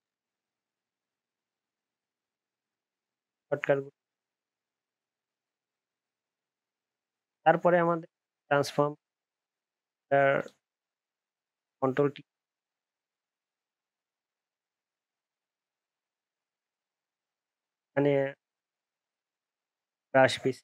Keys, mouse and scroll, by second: 3.2 alt+scroll up 1, 3.3 alt+scroll down 1, 3.4 alt+scroll up 1, 3.5 alt+scroll down 1, 3.6 alt+scroll up 1, 3.8 alt+scroll down 1, 3.8 alt+scroll up 1, 4.0 alt+scroll down 1, 4.1 alt+scroll up 1, 4.2 alt+scroll down 1, 4.4 alt+scroll up 1, 4.9 alt+scroll down 4.